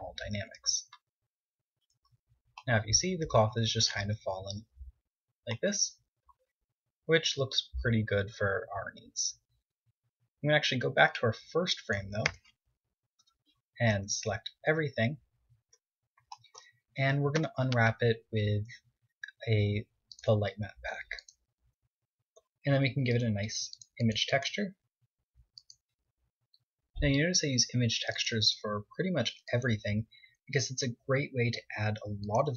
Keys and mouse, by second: 1.0 z, 4.6 middle click, 5.5-7.4 middle drag, 10.2-12.0 drag, 11.2 Tab, 12.2 KP_7, 13.0 a, 13.6 a, 13.6 z, 14.8 z, 16.3 u, 21.3 Tab, 22.0-26.2 drag, 28.3-29.9 drag, 31.5 Tab.